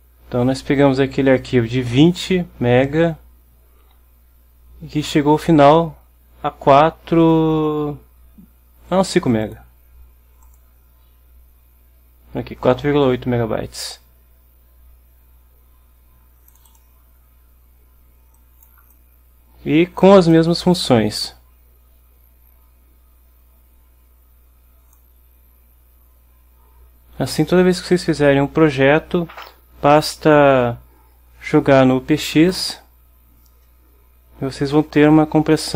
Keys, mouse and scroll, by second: 9.5 click, 10.5 click, 16.6 click, 18.4 click, 19.0-20.3 drag, 20.4-25.3 drag, 32.6 click.